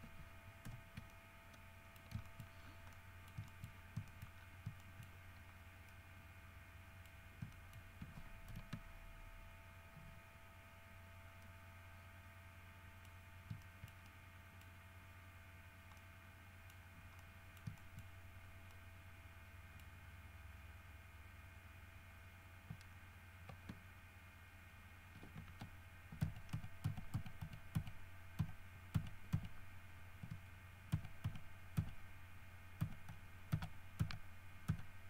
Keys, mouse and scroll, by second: 0.9 shift+n, 1.3-2.4 shift+middle drag, 2.5 shift+middle click, 2.8 shift+scroll down 1, 3.1 middle click, 3.9 shift+scroll up 1, 4.3 shift+middle click, 4.6 shift+scroll down 1, 5.0 shift+middle click, 5.4 shift+scroll up 1, 6.1-7.5 middle drag, 7.7 shift+middle click, 8.7 alt+h, 9.1 alt+scroll up 1, 9.4 scroll down 2, 11.2 scroll down 2, 11.6-13.3 middle drag, 13.3 scroll up 2, 13.8-14.9 shift+middle drag, 14.9 scroll up 2, 15.5-16.1 scroll down 2, 16.2 middle click, 17.0 scroll up 1, 17.4 middle click, 18.3 shift+scroll up 2, 18.6 shift+scroll down 3, 18.9-20.2 middle drag, 20.3 scroll up 2, 26.4 ctrl+z, 31.1 ctrl+z, 33.0 ctrl+z, 33.7 ctrl+z.